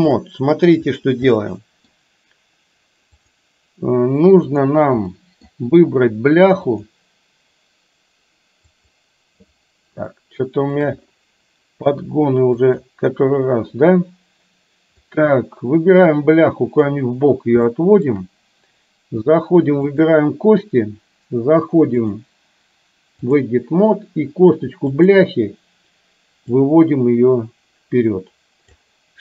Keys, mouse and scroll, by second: 0.3 middle click, 1.5 middle click, 5.1 middle click, 6.8 click, 8.8 click, 10.1 shift+middle click, 12.6 click, 15.1-17.0 drag, 17.9-18.3 shift+middle drag, 22.1-23.5 drag, 25.0 click, 26.6-28.9 drag.